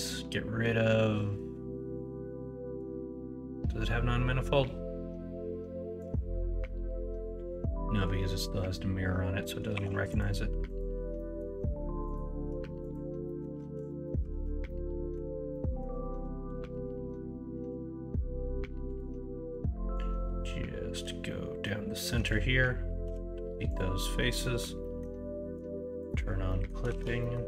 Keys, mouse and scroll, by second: 0.1-6.0 drag, 9.7 3, 11.1 middle click, 13.3 middle click, 13.6 alt+z, 13.9 middle click, 14.3 alt+z, 14.7 middle click, 15.5 middle click, 17.5 KP_1, 20.6-23.0 drag, 23.0 x, 24.1 middle click, 24.8 middle click, 26.0 click, 26.4 middle click, 26.9 alt+z, 27.2 middle click.